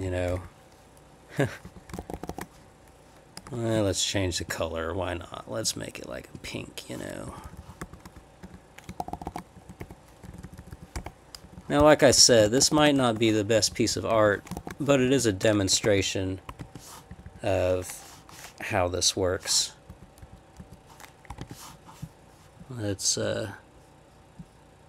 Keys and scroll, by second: 0.0 Right, 0.3 /, 1.6 Up, 2.0 shift+-, 2.1 shift+-, 2.3 shift+-, 3.4 Down, 3.4 Left, 7.3 Left, 7.8 /, 8.4 Up, 9.0 shift+-, 9.5 Down, 9.8 \, 10.2 Down, 10.3 Left, 10.7 Left, 11.0 \, 11.4 Left, 12.2-13.0 typing, 13.6 Left, 14.1 Up, 14.6 shift+-, 14.9-15.6 Down, 15.7 Escape, 15.8 j, 16.5 Escape, 16.6 k, 17.1 Up, 17.3 Up, 19.9 Up, 20.2 Down, 20.6 Left, 21.4 ctrl+k.